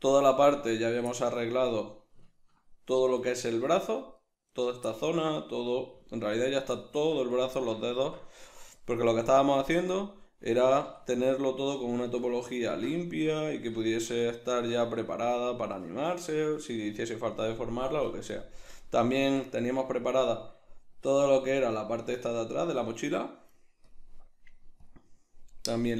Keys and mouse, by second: 0.8 right click, 1.1-4.2 shift+middle drag, 4.2-4.7 right drag, 4.9-5.4 shift+middle drag, 5.4 right drag, 6.0-7.3 ctrl+middle drag, 7.3 right click, 7.6-8.7 middle drag, 8.7-10.2 drag, 10.2-17.3 middle drag, 10.7 a, 17.3-17.8 right drag, 17.8-23.9 middle drag, 18.0 KP_Decimal, 23.9-25.9 drag.